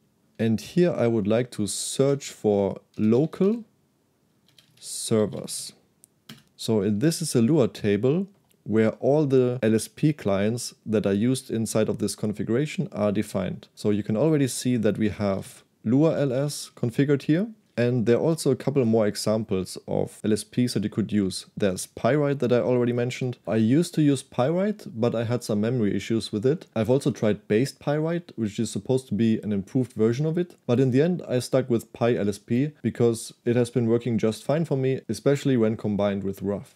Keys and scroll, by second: 2.0-7.6 typing, 6.4 Return, 14.3-18.9 typing, 21.2 k, 21.8 shift+v, 23.2 Escape.